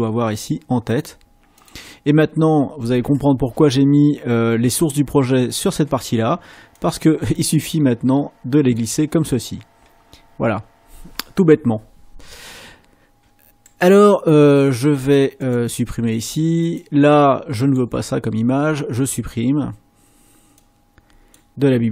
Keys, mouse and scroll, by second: 0.8 click, 1.5 click, 6.7 click, 7.3-9.0 drag, 13.6 click, 15.4 click, 16.6 click.